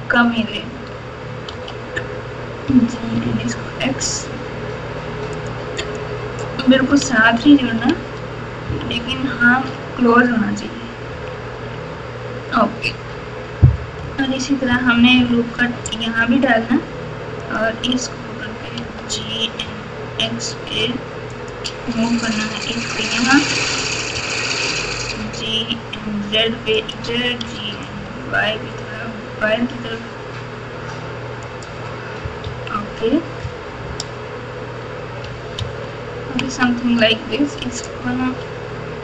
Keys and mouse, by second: 1.5 g, 5.8 click, 7.0 alt+z, 7.8 alt+z, 8.6-9.6 typing, 11.1 KP_2, 14.6 KP_6, 14.9 KP_6, 15.1 KP_6, 17.4 click, 18.8 g, 22.4 click, 22.8 click, 24.1 g, 27.4 g, 32.4 KP_3, 33.4 KP_Add, 33.9 KP_Add, 34.0 KP_Add, 34.0 KP_Add, 35.5 ctrl+KP_6, 36.1 ctrl+KP_6, 38.1 g.